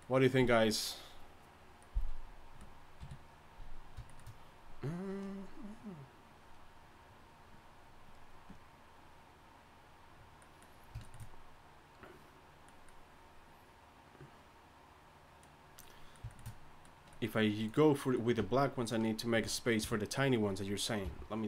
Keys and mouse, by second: 3.0 KP_3, 15.8 middle drag, 18.4 Tab, 19.8 KP_3, 21.0 g.